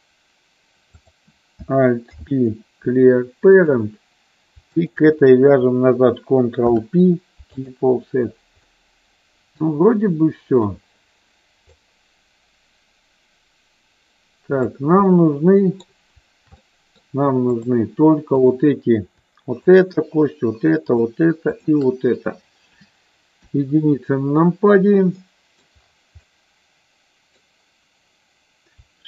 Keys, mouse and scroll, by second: 0.8 click, 2.1 alt+p, 6.6 ctrl+p, 8.7-10.6 middle drag, 11.6-14.7 drag, 15.1 middle click, 16.5 middle click, 17.5 click, 18.3 click, 19.6 shift+click, 20.9 shift+click, 21.6 shift+click, 23.4 KP_1, 25.1 middle click, 26.2-27.3 middle drag.